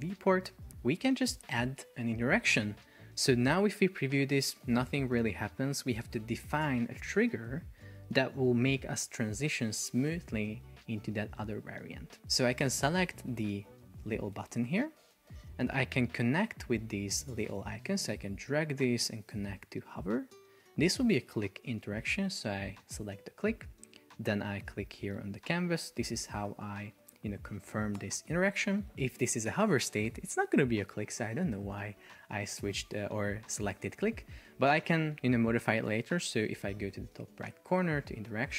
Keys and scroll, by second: 0.5 alt+v, 3.9 super+p, 6.1 Escape, 14.4 shift+super+4, 15.3 Escape.